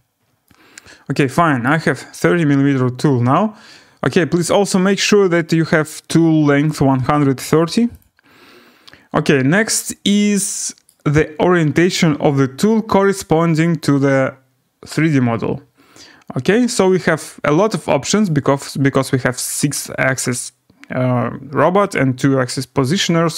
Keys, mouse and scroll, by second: 1.6 right click, 2.4-2.9 scroll, 3.9 scroll, 4.9 click, 5.1 click, 6.9 click, 8.0 click, 9.0-9.5 scroll, 10.8 right click, 15.5 right click, 18.2 right click.